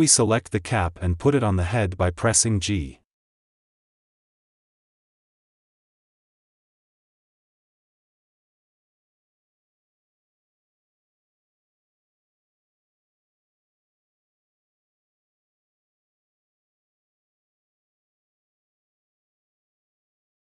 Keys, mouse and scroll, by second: 2.1-2.4 scroll up 4, 2.4-3.0 shift+middle drag, 3.0 s, 4.0 g, 5.0 shift+middle click, 5.3 click, 5.6 s, 7.1 r, 8.3 ctrl+z, 8.8 r, 10.3 g, 11.6 s, 13.1 r, 14.7 g, 18.0 r, 18.9 click, 19.3 click.